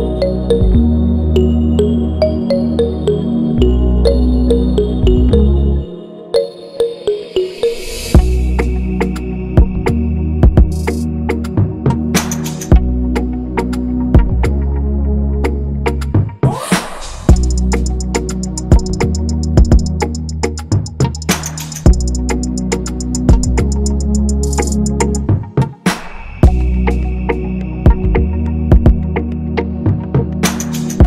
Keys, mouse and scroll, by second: 0.4 Delete, 4.7 right click, 7.8 right click, 10.2 ctrl+z, 19.7 ctrl+z, 29.5 ctrl+c, 30.1 ctrl+f.